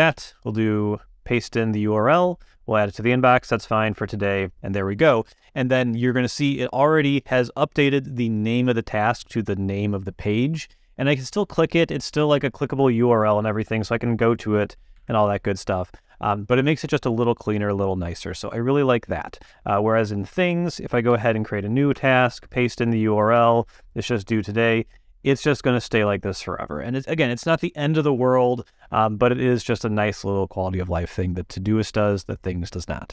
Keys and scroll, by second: 0.1 super+v, 14.9 super+m, 21.1 super+n, 21.9 super+v, 23.3 Return.